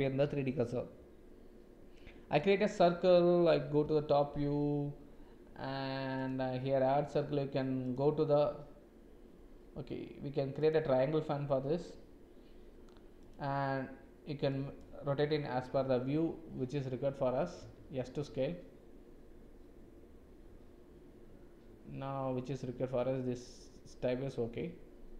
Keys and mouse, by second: 0.2 shift+a, 3.8 KP_7, 6.2 KP_7, 7.8 click, 10.6 click, 13.1-14.7 drag, 17.6 s.